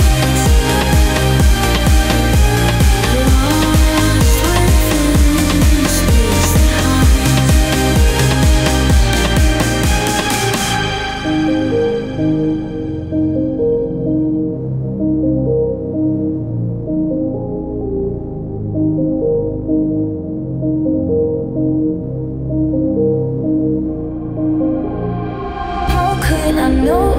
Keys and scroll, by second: 3.1 space, 5.5 ctrl+g, 7.1 space, 8.1 ctrl+z, 12.2 space, 14.4 t, 18.1 Caps_Lock, 19.2-20.4 typing, 22.8-23.9 typing, 26.7 ctrl+z.